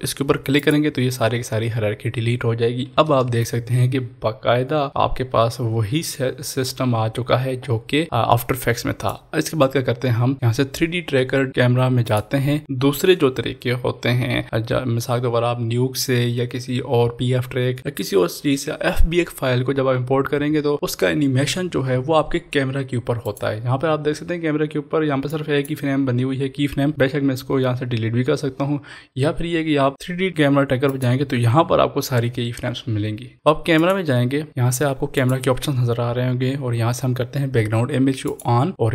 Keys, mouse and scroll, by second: 0.8 click, 3.2 ctrl+s, 4.9-11.0 drag, 12.0 click, 23.2 click, 23.2-27.8 drag, 30.9 click, 33.7 click, 33.8 click, 33.8 click, 38.4 click, 38.4 click.